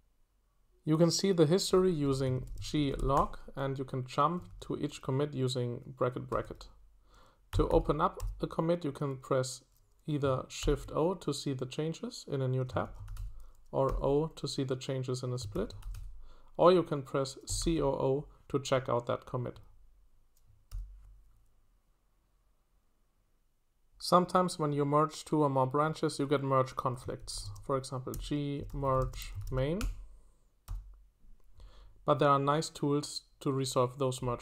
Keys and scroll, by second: 2.1-4.9 typing, 6.1-8.7 typing, 10.6 shift+o, 12.6-13.9 typing, 15.3-18.2 typing, 20.7 typing, 26.9-30.7 typing.